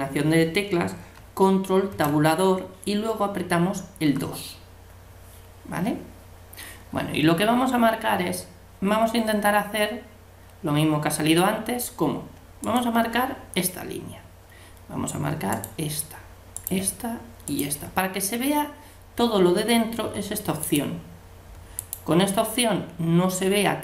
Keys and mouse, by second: 1.9 ctrl+Tab, 12.7-14.5 right drag, 15.5-19.2 right drag, 20.6-23.5 drag.